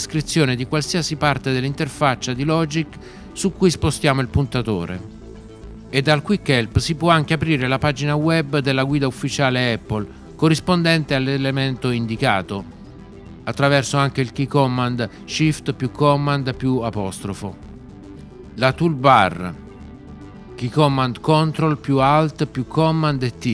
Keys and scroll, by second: 15.5 shift+super+', 21.4 ctrl+alt+super+t.